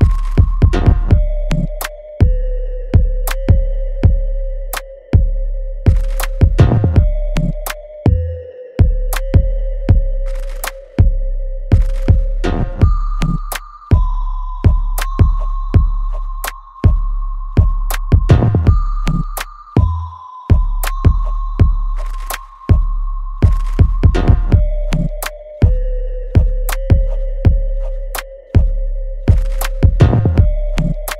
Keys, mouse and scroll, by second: 0.2 alt+middle click, 1.4 alt+right click, 2.4-4.7 alt+drag, 4.7 alt+right click, 5.2-7.1 alt+drag, 7.1 ctrl+z, 10.3-12.2 alt+drag, 12.2 alt+middle click, 14.5 click, 15.0 right click, 15.7 click, 16.0 alt+right click, 17.2 click, 17.7 right click, 18.6 click, 18.7 click, 25.7 alt+click, 26.3 right click, 26.9 click, 27.6 right click, 28.5 click.